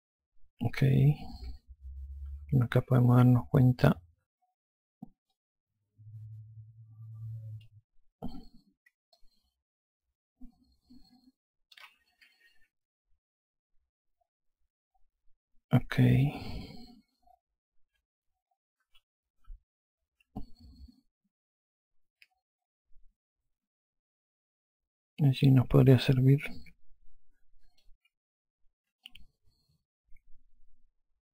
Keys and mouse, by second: 2.1 F3, 5.9 click, 8.9 F1, 9.7 alt+click, 13.2 F4, 17.1 F2, 19.4 F2, 20.0 F1, 21.0 alt+click, 29.7 alt+click.